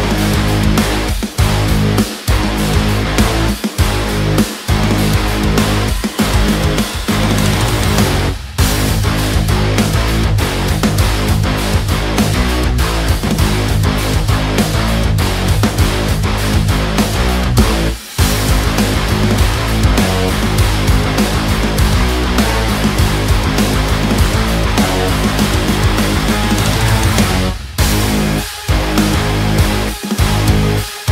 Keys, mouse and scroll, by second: 1.1 ctrl+space, 1.6-5.7 ctrl+drag, 5.7 alt+right click, 6.2 click, 11.7 ctrl+space, 11.9 ctrl+click, 12.4 ctrl+space, 14.0 e, 14.6 click, 16.1 ctrl+z, 16.7 click, 18.0 ctrl+space, 19.4-23.5 drag, 23.5 space, 23.8 click, 23.9 space, 24.2-28.5 ctrl+drag, 28.5 ctrl+space, 29.1 ctrl+space, 30.0 click.